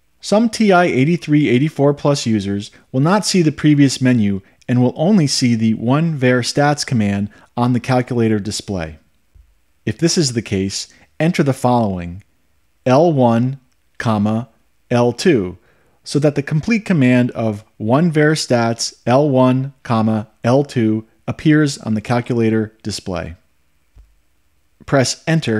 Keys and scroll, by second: 14.7 1, 16.2 ,, 18.3 2.